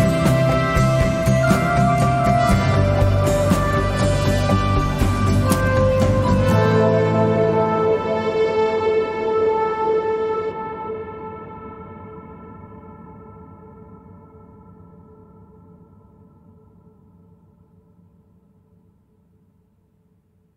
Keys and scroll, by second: 0.0 ., 0.2 5, 0.8 Return, 5.0 s, 5.5 1, 5.7 ., 6.3 Return, 9.4 s, 10.1 ., 10.3 5, 10.6 Return, 12.2 Tab.